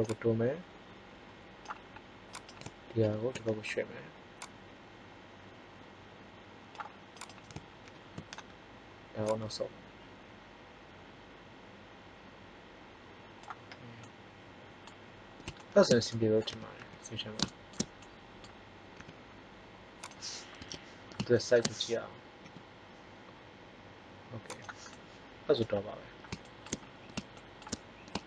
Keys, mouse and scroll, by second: 2.9 ctrl+l, 4.4 click, 7.2-8.8 right drag, 7.7 ctrl+l, 9.1-10.7 drag, 16.4 a, 16.7 a, 18.9 s, 20.6 KP_1, 22.4 g, 25.0-26.0 middle drag.